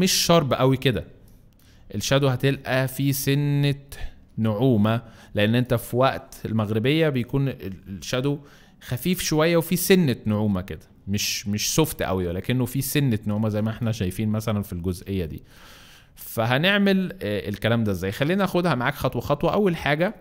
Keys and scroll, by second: 1.0 space, 2.1 alt+space, 5.2 alt+space, 13.4 space, 16.3 alt+space, 17.8 space, 19.3 alt+space, 20.1 alt+space.